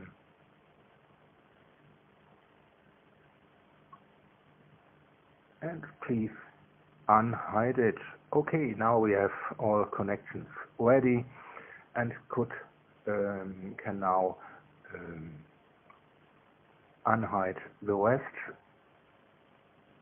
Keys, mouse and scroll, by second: 1.5 click, 3.2 -, 3.5 1, 3.9 Tab, 4.9 -, 5.1 1, 6.1 Return, 7.9 space, 8.9-16.4 drag, 16.8 click, 19.5 shift+click.